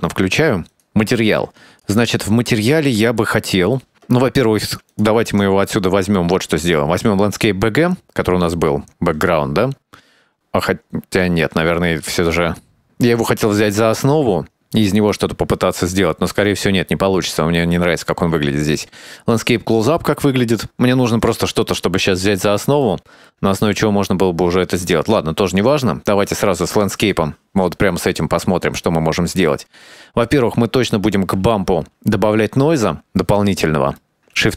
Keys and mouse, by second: 0.7 click, 1.0 shift+middle drag, 1.7 click, 2.0 middle click, 2.8 middle click, 4.4 middle click, 5.5-6.7 drag, 10.3-10.7 shift+middle drag, 12.7-17.6 drag, 23.0-23.4 shift+middle drag, 25.7 click, 28.1-28.6 middle drag, 29.3 shift+middle drag, 31.3-32.5 shift+middle drag, 33.5 middle click, 33.9 middle click, 34.2 shift+a.